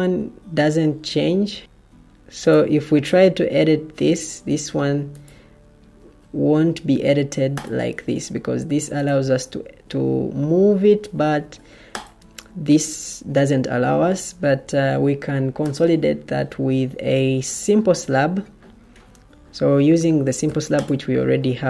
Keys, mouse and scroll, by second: 10.6 Escape, 11.4 Escape, 14.6 Escape, 17.0 Escape.